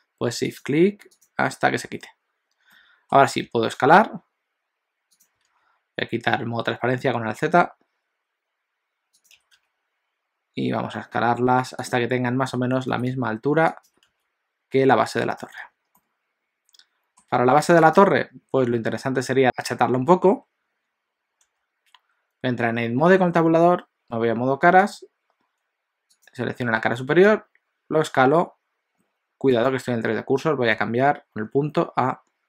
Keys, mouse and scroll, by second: 0.7 shift+click, 1.2 shift+click, 2.8 middle click, 3.4 s, 5.5 alt+z, 7.7 s, 13.9 s, 15.7 alt+a, 16.0 middle click, 18.0 click, 21.4 Tab, 24.9 click, 26.3 click, 27.3 s.